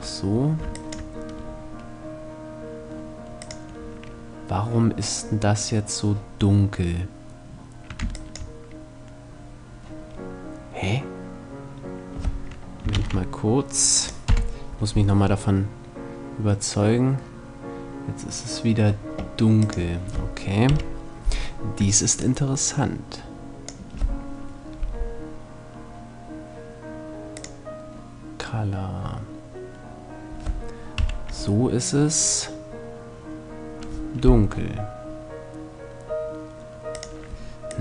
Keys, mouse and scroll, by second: 12.5 ctrl+s, 14.0 F12, 19.6-23.4 drag, 23.3 F11, 30.7 F12, 36.9-37.8 drag.